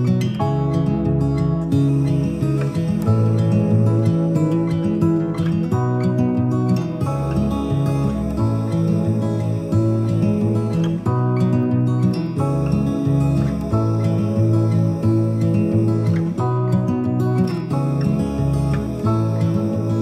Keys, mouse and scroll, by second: 5.1 click, 13.3 click, 15.9 click, 17.9-20.0 alt+drag.